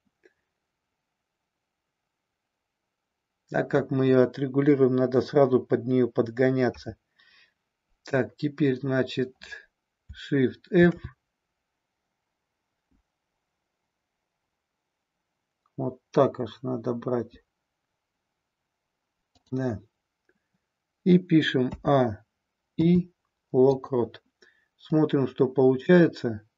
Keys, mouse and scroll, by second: 6.6 KP_0, 10.6 shift+f, 13.5-17.2 Up, 19.4 click, 21.6 a, 22.6 i, 24.9-26.5 drag.